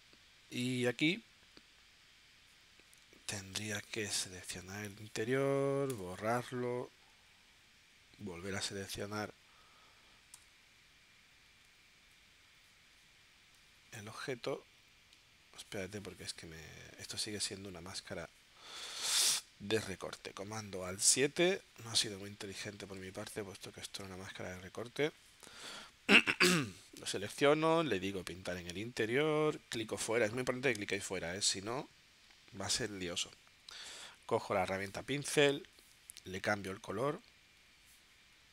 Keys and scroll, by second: 3.0 space, 5.9 BackSpace, 10.3 v, 23.3 super+y.